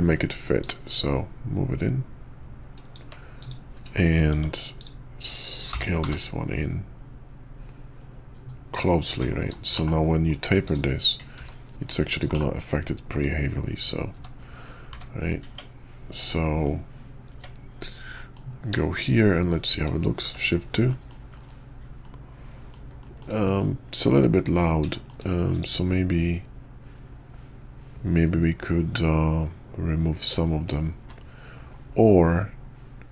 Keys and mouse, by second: 4.3 Tab, 4.8 click, 5.7 g, 9.3 shift+middle click, 9.7 /, 10.1 middle click, 10.6 click, 11.3 s, 12.3 /, 13.1 `, 14.1 `, 14.9 `, 15.5 Tab, 16.3 middle click, 17.3 Tab, 18.1 middle drag, 18.8 shift+drag, 20.2 shift+2, 20.9 drag, 21.3 KP_5, 22.0-22.7 drag, 23.0 shift+drag, 23.4-24.4 drag, 24.9 shift+middle click, 25.5 click, 31.0 q.